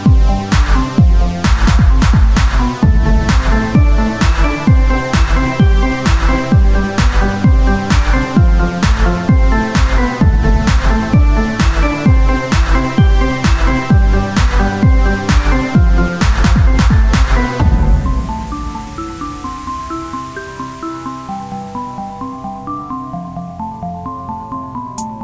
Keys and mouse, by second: 1.9 shift+a, 5.0 Tab, 5.9 shift+a, 8.0 ctrl+a, 9.1 Tab, 10.2 s, 14.0 z, 15.7 Tab, 15.7 click, 16.6 ctrl+n, 17.1 Tab, 17.8 s, 19.8-23.6 drag, 20.4 right click, 24.5 click, 24.6 Tab.